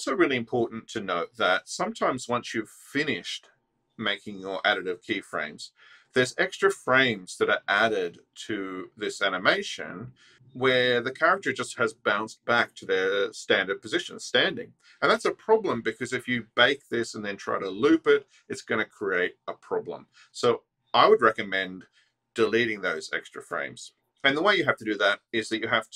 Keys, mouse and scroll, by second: 2.0 click.